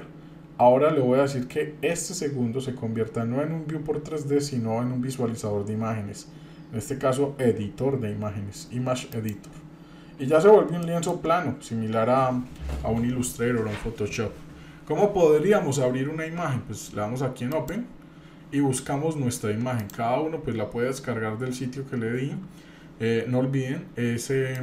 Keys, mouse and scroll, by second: 9.9-10.4 scroll up 2, 10.4 scroll down 1, 10.8 shift+middle click, 11.3-12.1 scroll up 1, 17.5 click.